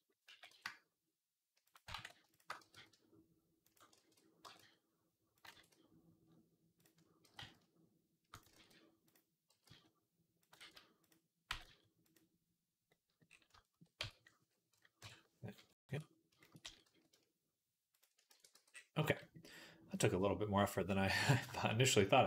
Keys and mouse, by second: 0.1-3.6 right drag, 0.1 g, 1.8 ctrl+z, 2.2 shift+click, 2.4 g, 3.8 ctrl+z, 4.3 g, 5.4 ctrl+z, 7.1 g, 8.4 ctrl+z, 9.4 g, 10.4 ctrl+z, 11.3 g, 13.8 Tab, 14.8 KP_1, 16.5 s, 18.0 ctrl+s, 18.2 ctrl+a, 19.0-20.1 right drag, 19.8 click, 19.8 middle click, 20.2 click, 20.2 middle click, 20.2-21.3 right drag, 21.9 right click.